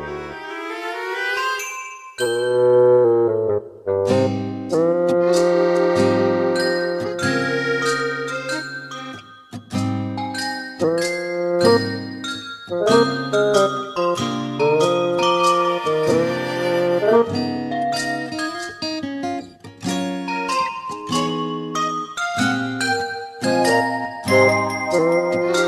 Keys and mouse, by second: 10.0 middle click, 11.1 middle click, 12.0 middle click, 17.6 right click, 21.3 middle click, 21.8 middle click, 22.6 middle click, 23.0 middle click, 23.3 middle click, 23.9 middle click, 24.3 middle click, 24.9 middle click.